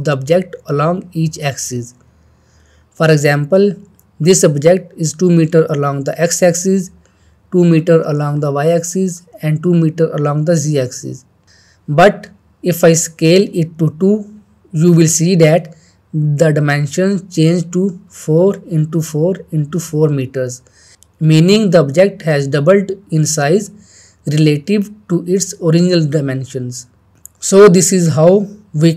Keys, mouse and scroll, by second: 10.4-11.3 middle click, 14.2 shift+middle click, 14.5-15.1 drag, 25.4-26.4 drag.